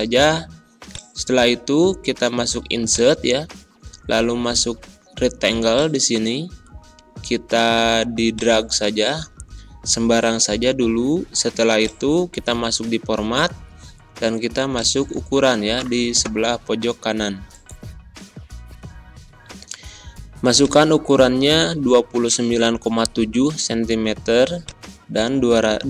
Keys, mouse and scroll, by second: 8.5-11.7 drag.